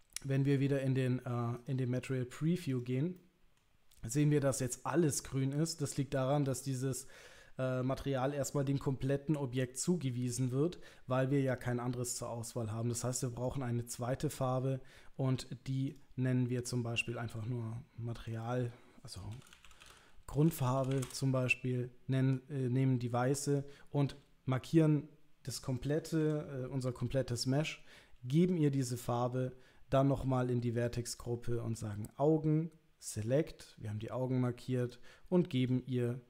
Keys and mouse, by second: 2.2 middle click, 2.7 click, 3.2 middle click, 13.4 click, 15.9 click, 18.3 click, 18.4-21.7 drag, 23.5 click, 24.1 l, 26.2 a, 29.1 click, 33.2 click, 34.8 click, 35.6 click.